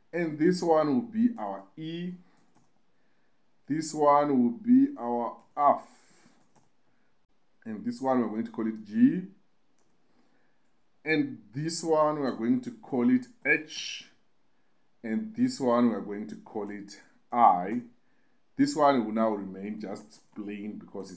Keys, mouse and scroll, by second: 1.2 click, 1.4-3.0 drag, 3.8 click, 5.2 click, 5.4-7.0 drag, 7.1 click, 7.3 click, 10.0 click, 11.2-13.2 drag, 15.5 click, 15.7-17.1 drag, 18.2-21.0 drag, 19.5 BackSpace, 19.6 BackSpace.